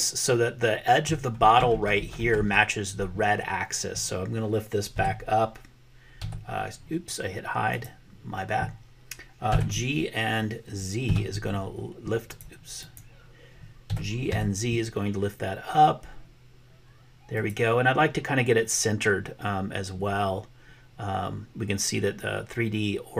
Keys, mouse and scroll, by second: 4.9 h, 6.2 h, 7.8 click, 9.4 g, 11.1 z, 12.8 click, 13.9 g.